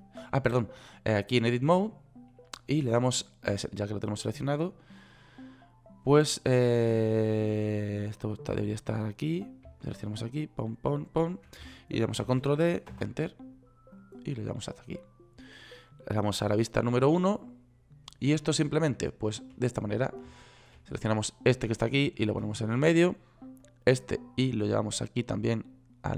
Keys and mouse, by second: 12.7 shift+d, 17.2 KP_1, 22.4-23.5 middle drag.